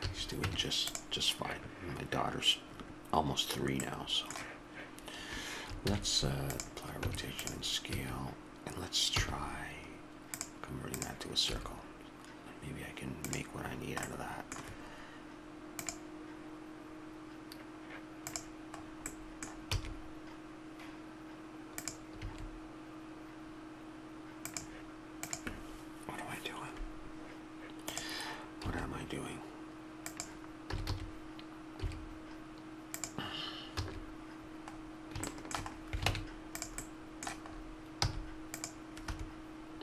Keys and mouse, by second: 0.0 a, 0.4 Tab, 3.9-5.8 drag, 5.8 ctrl+a, 7.0 Tab, 7.9 a, 9.2 w, 14.2-15.9 middle drag, 18.8 middle click, 19.7 e, 22.1 s, 28.7 s, 30.7 a, 30.9 a, 31.7 s, 33.8 a, 35.8 middle click, 36.1 ctrl+Tab, 38.0 c.